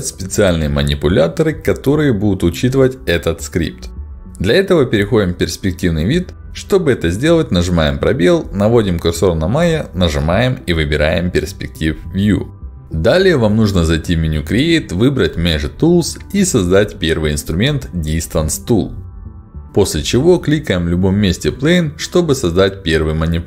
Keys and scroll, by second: 4.5 space.